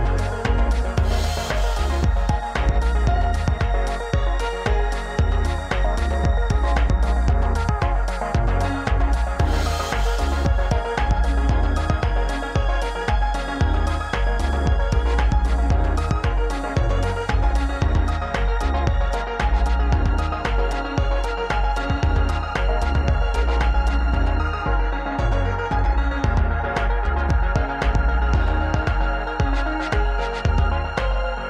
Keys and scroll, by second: 0.0 shift+a, 2.7 shift+a, 10.7 KP_1, 11.9 Tab, 13.9 s, 15.1 e, 16.8 s, 18.5 alt+z, 22.2 r, 23.5 r, 24.4 alt+z, 25.1 g, 25.9 s, 29.1 s, 30.5 s.